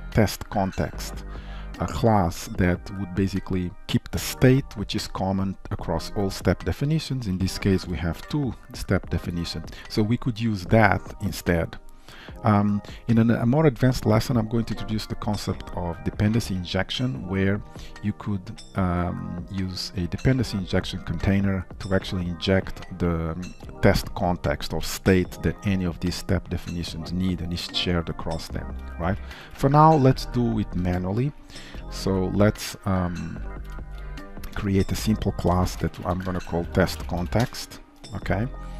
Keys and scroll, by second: 8.3 alt+1, 9.7 ctrl+shift+F12, 32.0 alt+1, 32.6 Up, 33.8 alt+Insert.